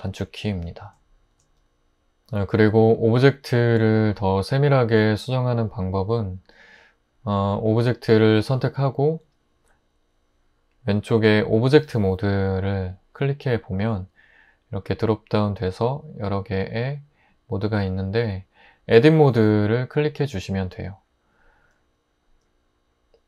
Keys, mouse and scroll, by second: 1.3 alt+r.